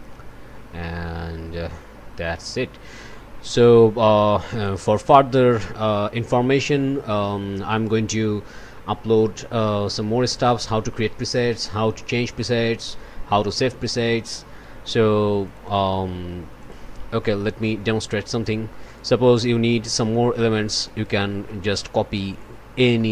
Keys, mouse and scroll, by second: 4.5 click, 16.6 click, 17.2 click, 18.3 click, 18.8 click, 20.7 click, 21.4 click, 22.1 click, 22.9 click.